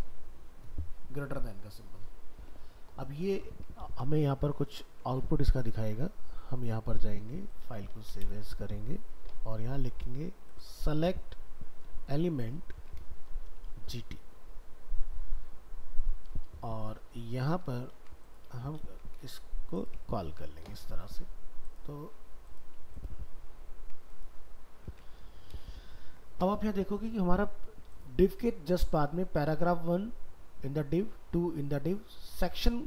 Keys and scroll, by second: 3.2 ctrl+s, 7.2 ctrl+Tab, 7.9 alt+f, 8.0 alt+移, 12.5 ctrl+shift+Left, 17.7 ctrl+a, 17.9 ctrl+c, 18.5 ctrl+a, 24.9 ctrl+s.